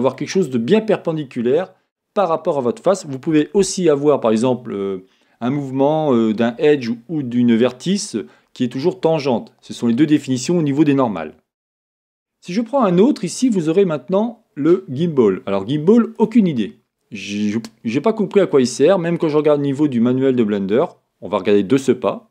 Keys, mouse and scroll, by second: 12.9 click, 15.2-17.3 drag, 17.3-22.3 middle drag.